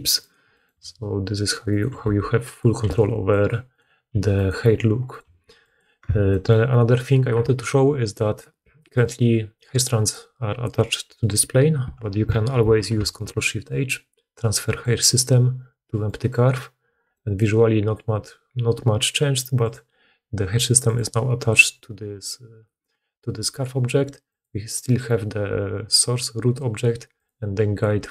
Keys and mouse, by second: 0.1 click, 0.7 g, 1.9 r, 2.7 g, 3.6 click, 4.0 g, 5.0 click, 5.2 g, 5.5 click, 5.6 middle click, 6.0 Tab, 12.5 ctrl+shift+h, 19.6-24.3 drag, 27.1 click.